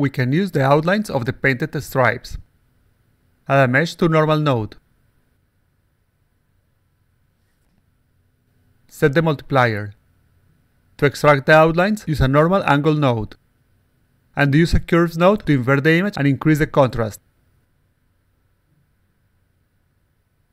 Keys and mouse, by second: 0.0 click, 0.2 click, 0.5 click, 1.4 x, 1.9 click, 2.0 x, 2.1 click, 3.1 click, 4.1-4.8 drag, 5.4 click, 5.7 click, 6.0 click, 6.6 click, 7.7 click, 9.2 click, 9.6 click, 10.1 click, 11.8 click, 13.1 click, 14.4 click, 15.1 click, 16.2 click, 17.4-18.5 drag, 19.2 alt+click, 19.8-20.5 alt+drag.